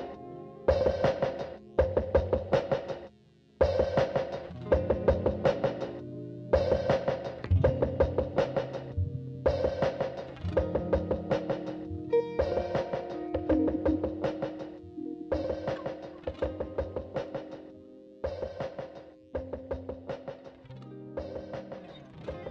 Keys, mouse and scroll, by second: 1.2 1, 1.5 click, 1.8 shift+click, 2.2 KP_Decimal, 2.4 scroll down 1, 3.0-3.4 scroll down 1, 4.0 shift+click, 5.0 x, 5.8 2, 6.0 click, 6.2 shift+click, 6.7 e, 7.5 `, 8.0 click, 8.4 shift+click, 8.8 click, 9.1 shift+click, 9.2 f, 9.8 click, 10.0 scroll down 1, 10.2 `, 10.9 ctrl+r, 12.2 click, 12.6 shift+click, 12.8 g, 15.1 click, 15.3 shift+click, 15.5-17.6 typing, 15.8 right click, 17.4 right click, 18.2 click, 18.6 x, 19.5 `, 20.4 click, 20.6 `, 20.9 right click, 21.6 click, 22.0-22.5 right drag, 22.2 alt+a.